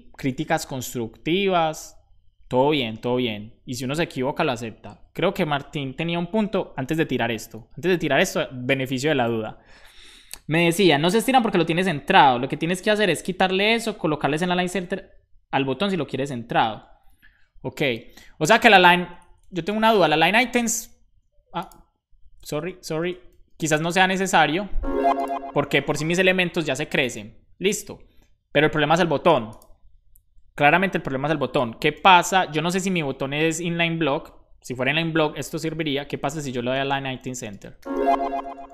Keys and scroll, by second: 19.9 super+s, 23.2 super+s, 32.3 Return, 35.4-36.4 typing, 36.6 Return, 37.4-38.7 typing.